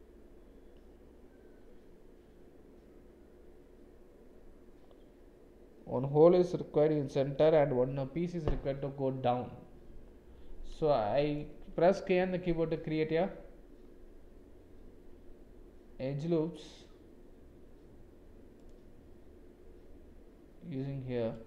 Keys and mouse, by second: 10.9 middle click, 12.2 k.